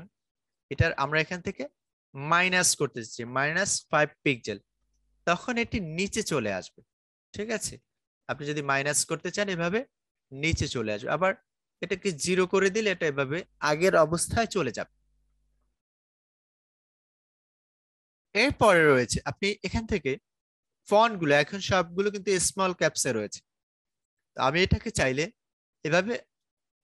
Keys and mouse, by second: 0.8-3.2 drag, 3.2 -, 4.7 Return, 6.8 click, 7.7 Up, 12.8 Return, 19.3-26.8 drag.